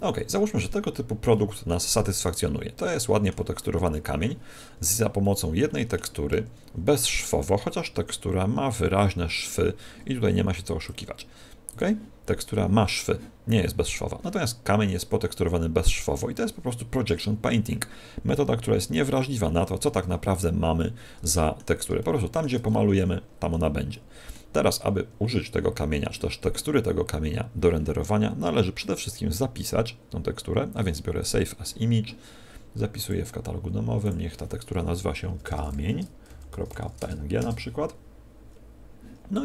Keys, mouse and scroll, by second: 0.1 middle click, 0.8-1.4 scroll down 5, 1.3 middle click, 2.1 middle click, 6.4 Tab, 7.0 Tab, 8.7 click, 10.8 click, 12.2 scroll up 3, 19.5 Tab, 19.9 Tab, 20.7 middle click, 21.9 shift+middle click, 22.7 middle click, 23.9 middle click, 28.9 click, 37.6 Return.